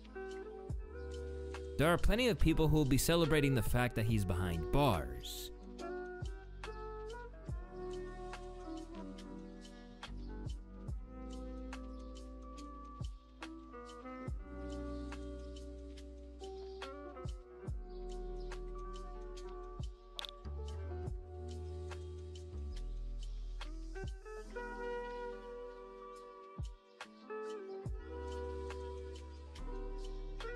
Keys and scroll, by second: 1.4 space, 5.0 space, 9.3 1, 10.8-11.5 typing, 29.3-30.5 scroll.